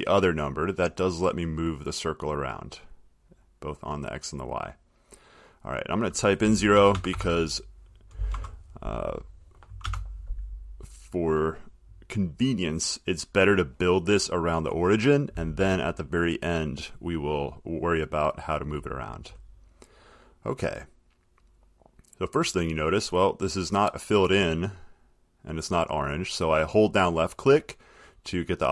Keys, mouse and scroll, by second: 2.8 click, 4.5 click, 5.8 click, 6.9 BackSpace, 7.1 BackSpace, 8.5 Tab, 9.5 click, 10.0 BackSpace, 11.2 click, 25.9 click, 27.6 click.